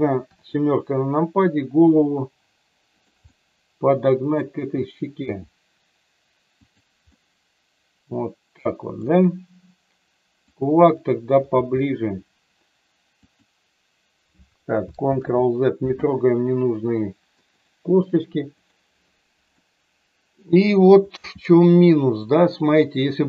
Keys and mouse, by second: 0.2 KP_7, 1.7 r, 2.8 click, 3.4-4.4 middle drag, 5.1 r, 7.1-8.8 middle drag, 10.5 click, 11.6 g, 13.2 click, 15.2 ctrl+z, 17.6 click, 18.6 click, 19.4 middle click, 21.2 g, 22.6 click.